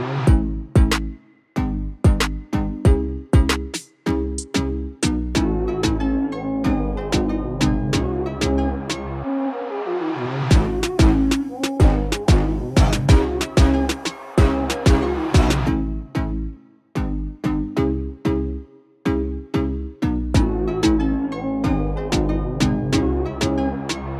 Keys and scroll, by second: 9.5 space, 10.0 KP_2.